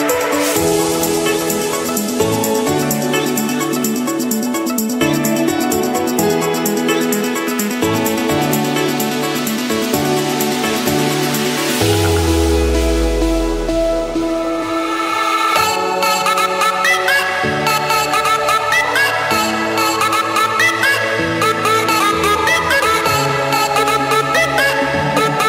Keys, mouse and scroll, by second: 0.4 click, 1.0 click, 2.0 Return, 2.7 middle click, 4.4 typing, 5.6 Return, 5.8 Return, 7.1 click, 9.2 click, 10.1-11.2 scroll down 3, 11.2-11.6 scroll up 1, 11.9 Return, 11.9-12.2 scroll, 12.6 click, 13.4 click, 14.4 j, 14.8 Return, 17.1 click, 17.7 Escape, 19.5 click, 21.2 click, 22.3 click, 22.5-22.9 scroll down 2, 22.9 scroll up 3, 24.0 click, 25.0 click.